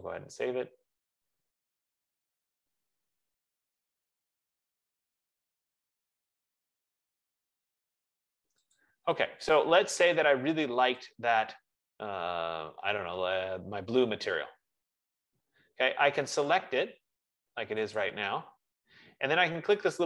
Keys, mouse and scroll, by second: 0.3 click, 9.3 click, 18.3 click.